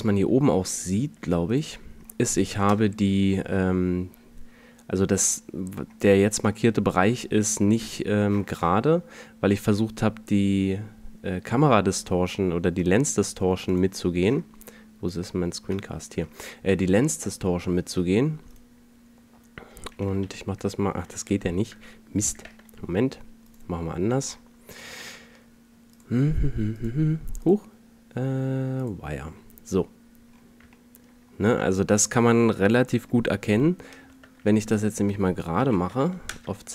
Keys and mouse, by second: 15.6 n, 18.3 click, 20.2 z, 21.1 alt+z, 22.3 Tab, 33.9 Tab, 35.5 s.